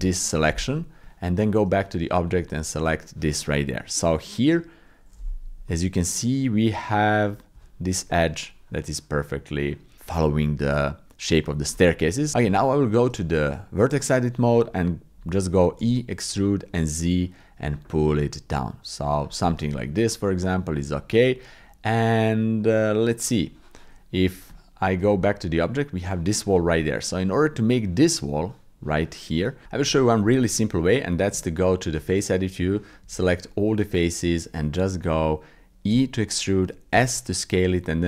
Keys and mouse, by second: 1.0 Tab, 2.2 click, 3.7 click, 5.7 click, 7.5 g, 12.4 Tab, 13.4 click, 15.8 e, 19.7-21.5 drag, 22.6 click, 24.5 Tab, 25.2 click, 26.6 click, 28.5 click, 29.6 click, 29.9 shift+click, 30.3 click, 31.3 Tab, 32.1 click, 33.0 a, 33.4 click, 33.9-34.9 drag, 35.9 e.